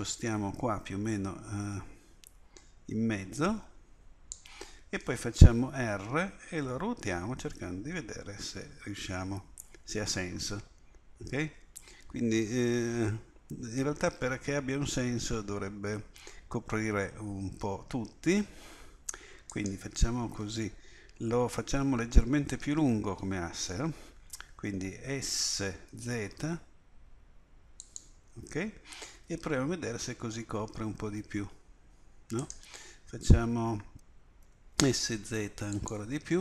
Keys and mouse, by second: 5.8 r, 25.4 s, 29.2 r, 34.4 s.